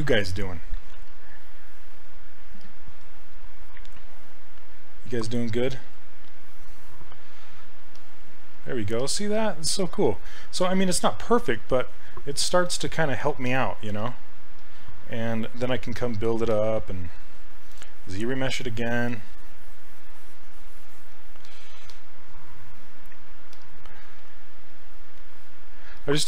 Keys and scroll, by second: 16.5 s, 24.2 s.